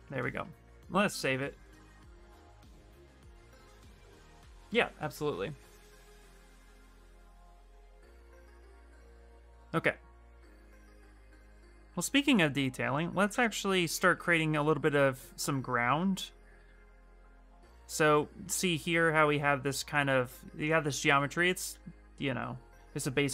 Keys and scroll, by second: 0.9 ctrl+s, 1.7 Return, 1.8 Return, 20.8 shift+f.